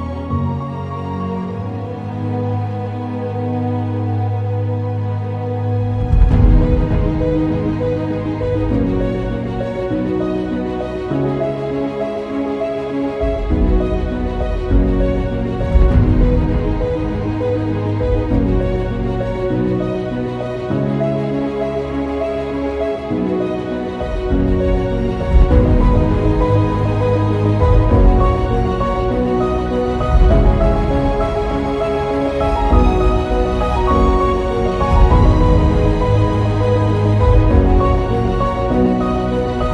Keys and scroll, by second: 2.0 ctrl+z, 2.4 ctrl+z, 6.2 ctrl+z, 8.2 ctrl+z, 10.7 ctrl+z, 27.4 ctrl+alt+g.